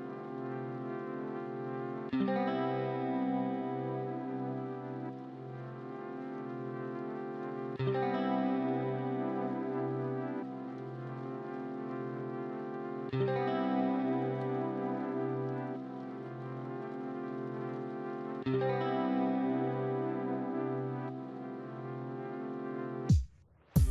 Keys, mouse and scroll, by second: 0.4 middle click, 2.0 alt+shift+click, 2.5 alt+shift+click, 3.2 alt+shift+click, 3.8 alt+shift+click, 5.0 alt+shift+click, 5.5 alt+shift+click, 6.2 alt+shift+click, 6.7 alt+shift+click, 11.2 alt+shift+click, 11.3 alt+shift+click, 11.8 alt+shift+middle click, 12.3 alt+shift+middle click, 12.9 alt+shift+middle click, 13.5 alt+shift+middle click, 13.8 alt+shift+middle click, 14.2 alt+shift+middle click, 14.8 alt+shift+middle click, 14.9 alt+shift+middle click, 17.1 alt+shift+w, 17.4 alt+shift+middle click, 17.4 alt+shift+middle click, 17.8 alt+shift+middle click, 18.2 alt+shift+middle click, 18.9 alt+shift+middle click, 20.1 middle click.